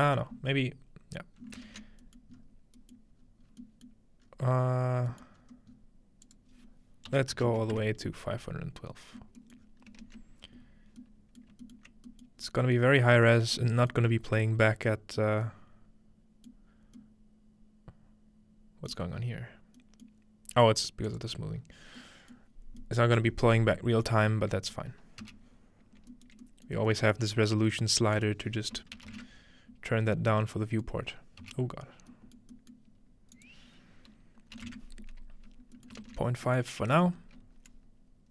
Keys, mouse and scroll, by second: 0.8-2.4 scroll down 3, 2.0 ctrl+middle click, 2.4 scroll up 1, 3.0-4.4 middle drag, 3.0 scroll up 1, 3.2-4.3 scroll down 1, 4.3 scroll up 1, 5.4-5.8 scroll up 3, 6.3 click, 7.3 click, 7.3-7.7 scroll up 1, 9.4-10.2 middle drag, 9.6-11.0 scroll down 1, 11.0-11.4 middle drag, 12.4 middle click, 12.4-14.4 scroll up 1, 13.1 shift+middle click, 13.4 shift+middle click, 14.8 shift+middle click, 15.3 middle click, 15.6-16.5 scroll up 1, 16.5 scroll up 1, 16.7-17.0 middle drag, 16.7 scroll down 1, 18.9 middle click, 19.1-19.8 scroll up 1, 20.2-22.0 middle drag, 21.1-22.4 drag, 22.4 middle click, 22.5-23.8 scroll down 1, 23.2 middle click, 23.8 scroll down 1, 24.1-26.0 shift+middle drag, 26.3-28.8 shift+middle drag, 28.2 click, 30.1 middle click, 31.1-31.5 scroll down 1, 33.4 click, 35.8 ctrl+middle click, 36.2-37.2 scroll down 1, 36.6 typing, 37.2 scroll up 1, 37.7-38.3 drag, 38.2-38.3 typing.